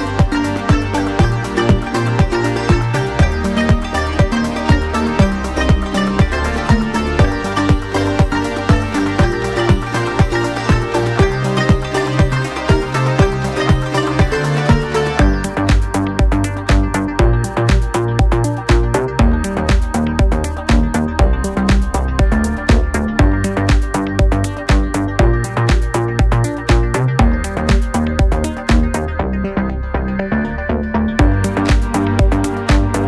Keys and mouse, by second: 3.9 shift+a, 5.5 s, 6.5-9.0 middle drag, 6.8 s, 8.4 s, 9.0-10.3 drag, 9.9 s, 10.3-22.7 middle drag, 10.7 KP_1, 10.8 KP_3, 11.8 r, 12.6 g, 13.7 click, 14.3-16.4 shift+drag, 15.7 s, 16.9 shift+d, 17.9 r, 19.2 g, 19.8 r, 20.5 g, 22.7-27.1 shift+drag, 27.1 middle click, 27.8-33.0 shift+drag.